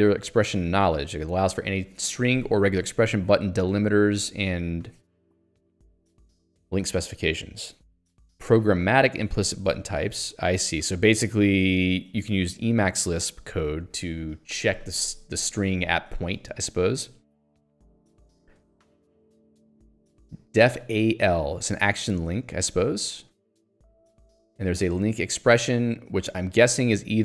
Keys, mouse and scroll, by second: 9.5-10.8 scroll down 1, 16.5-16.9 scroll down 1, 18.9 middle click, 23.9-24.3 scroll down 1, 24.5 scroll up 1.